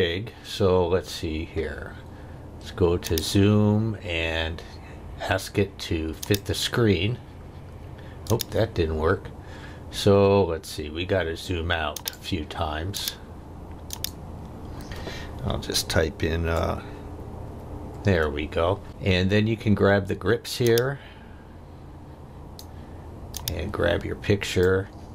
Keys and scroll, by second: 17.0 -.